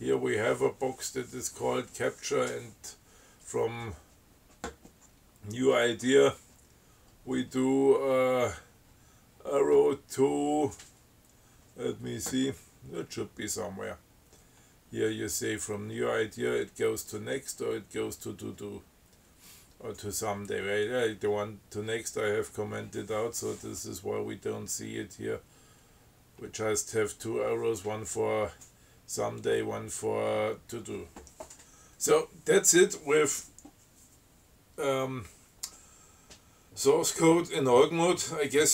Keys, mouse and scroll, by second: 23.3 scroll down 1, 23.9 scroll down 1, 24.3 scroll up 1, 24.5 scroll down 1, 24.7 scroll up 1, 24.8 scroll down 1, 25.9 scroll down 2, 26.9 scroll up 2, 30.8 scroll down 1, 31.8 scroll up 2.